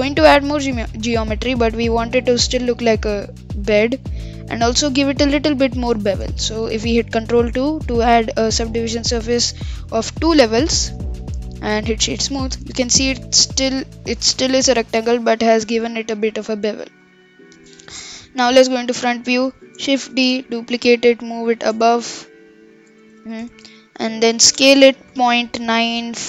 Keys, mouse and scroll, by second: 6.1 Tab, 10.7 ctrl+2, 11.5-12.3 right drag, 12.3 scroll up 1, 12.5-13.9 middle drag, 13.9-14.4 scroll down 1, 14.4-17.5 middle drag, 17.5-18.4 scroll down 5, 18.4 KP_1, 18.9-19.6 scroll up 6, 19.6 shift+d, 21.9-22.4 scroll up 10, 22.8-24.1 scroll down 14, 24.1-24.5 shift+middle drag, 24.5 scroll up 4, 24.7 s.